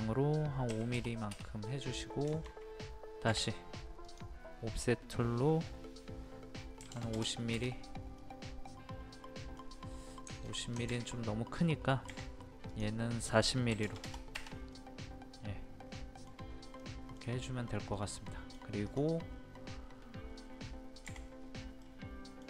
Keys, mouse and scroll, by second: 0.7 KP_5, 1.7 middle click, 2.3-3.4 shift+middle drag, 4.0 click, 6.8 KP_5, 8.2-10.3 middle drag, 12.1 o, 12.7 click, 13.7 KP_4, 14.7-18.9 middle drag, 18.9 click, 21.0 p, 21.8 middle click.